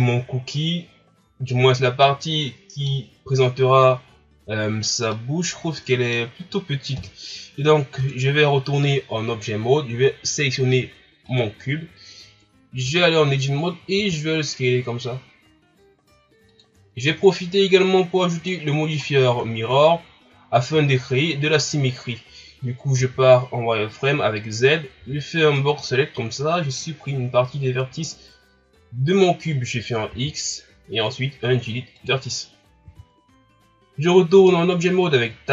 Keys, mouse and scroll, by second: 0.5 scroll down 2, 1.6-2.0 scroll up 1, 2.0-5.0 middle drag, 5.1-7.0 middle drag, 7.0 KP_1, 7.9 Tab, 11.3 right click, 12.9 Tab, 14.0 s, 17.0 ctrl+scroll down 2, 17.4 scroll up 1, 18.3 right click, 19.1 scroll down 1, 19.4 shift+scroll up 4, 20.1 scroll up 2, 20.8 shift+scroll down 4, 23.1 z, 25.0 b, 30.1 x, 32.9 z, 33.9 ctrl+scroll up 1, 34.3 Tab.